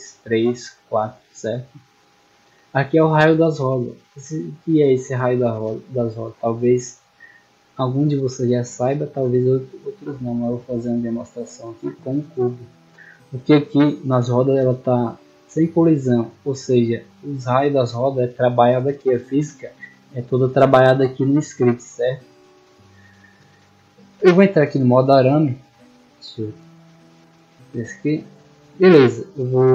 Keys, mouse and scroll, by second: 0.0 click, 0.5 click, 1.4 scroll down 1, 4.4-4.7 middle drag, 4.9 a, 5.3 scroll down 1, 6.1-7.4 middle drag, 8.5 click, 8.9 shift+a, 10.1 click, 10.8-11.7 drag, 12.0-12.4 middle drag, 12.7 middle click, 13.3 right click, 15.0 click, 16.5-17.1 middle drag, 19.7 click, 22.0 right click, 22.5-23.3 middle drag, 24.8 scroll down 2, 25.3 shift+middle drag, 26.1 scroll down 2, 27.4 click, 27.8 scroll down 2, 28.4-28.7 drag, 29.0-29.4 drag.